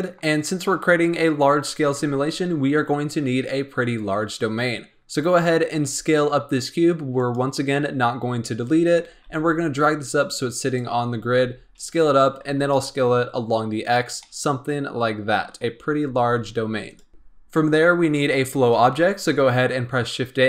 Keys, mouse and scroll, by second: 5.8 s, 7.5-8.9 scroll down 4, 9.0 g, 11.1 s, 12.1 s, 14.2-15.8 middle drag, 15.8 s, 17.1-18.6 scroll down 1, 19.3 shift+a.